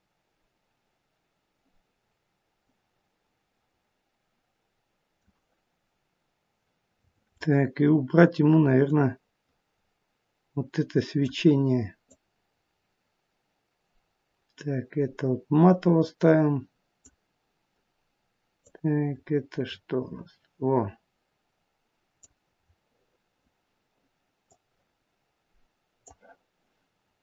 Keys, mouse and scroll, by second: 6.3 scroll up 1, 7.1 scroll down 5, 8.9 click, 8.9 scroll down 4, 12.1 click, 18.6 click, 22.5-23.0 scroll down 5, 24.3 click.